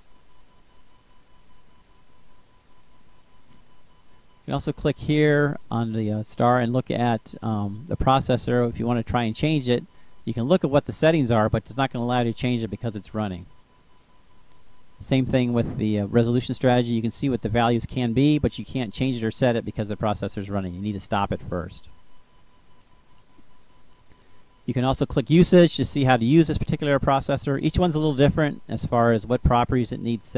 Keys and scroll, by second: 13.4 BackSpace.